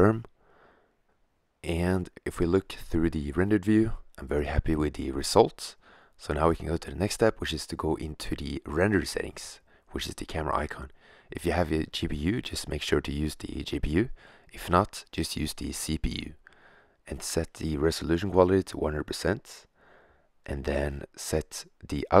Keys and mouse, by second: 1.7 shift+z, 5.9 shift+z, 18.2 0, 21.4-22.2 middle drag.